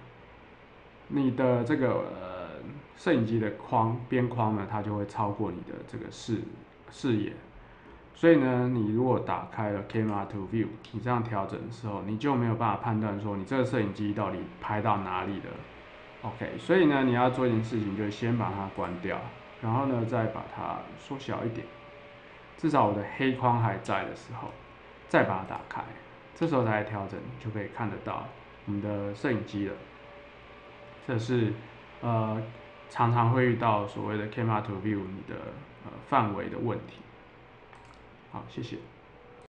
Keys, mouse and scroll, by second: 9.9 click, 10.8-13.0 middle drag, 13.9 middle click, 14.0 click, 14.2-15.7 middle drag, 18.7 click, 20.3 middle click, 20.7-22.2 middle drag, 23.8 ctrl+middle click, 25.4 click, 26.4-28.2 middle drag, 37.7 click, 39.4 click.